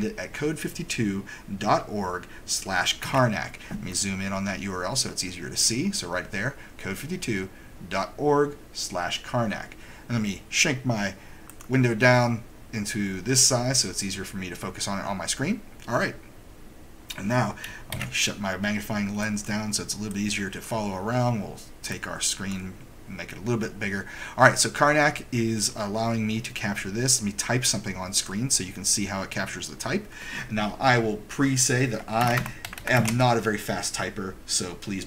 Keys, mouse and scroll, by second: 3.0 super+=, 11.7 click, 12.4-16.6 right drag, 17.9 super+Escape, 19.4 click, 20.7 click, 22.5 click, 26.2 right drag, 26.4 right drag, 26.9 right click, 28.3 click, 32.1-32.9 typing.